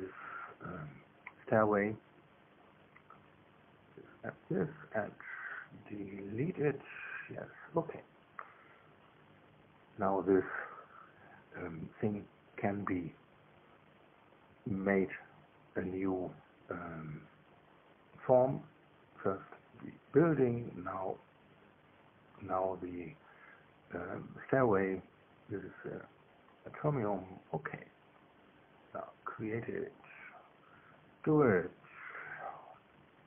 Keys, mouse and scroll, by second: 2.6 click, 4.5 ctrl+click, 7.0 click, 8.2-14.1 middle drag, 10.5 KP_1, 11.2 KP_3, 14.4 click, 17.9 click, 19.8 click, 20.7 click, 22.5 click, 24.2 click, 27.2 click, 29.6 click, 31.2 click, 32.6 click.